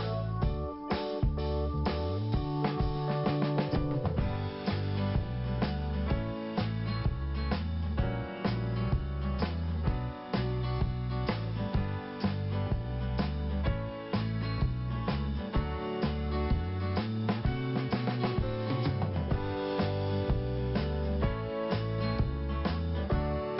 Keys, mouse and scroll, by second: 0.6 5, 3.1 click, 3.2 click, 3.3 click, 3.4 click, 4.4 scroll up 1, 8.5 scroll up 1, 9.9 click, 14.7 scroll down 1, 15.3 scroll up 1, 17.2 click, 17.5 double click, 18.6 double click, 20.5 click, 20.6 click, 21.9 click, 22.0 click, 23.2 click.